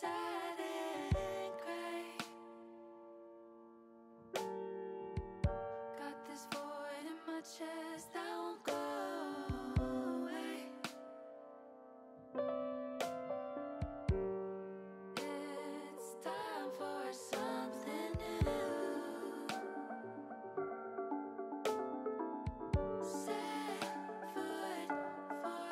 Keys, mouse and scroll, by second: 0.9 click, 1.9 click, 2.9 ctrl+z, 3.3-5.9 middle drag, 7.1 shift+middle click, 8.3 shift+click, 9.2 shift+click, 9.6 shift+click, 9.9 shift+click, 11.0 middle click, 12.7 middle click, 13.6 shift+click, 14.1 middle click, 14.2 middle click, 15.5 middle click, 16.9 KP_7, 19.5-20.8 drag, 23.0-24.3 drag, 25.4 click.